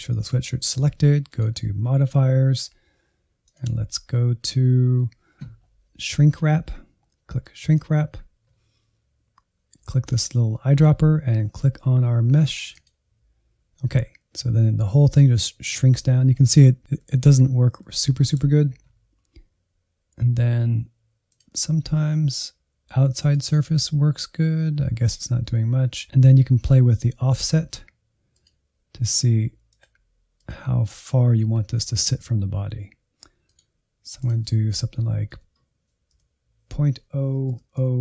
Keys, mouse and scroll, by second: 14.6-16.1 middle drag, 16.1-17.0 scroll up 3, 17.0-20.8 middle drag, 21.3-38.0 drag.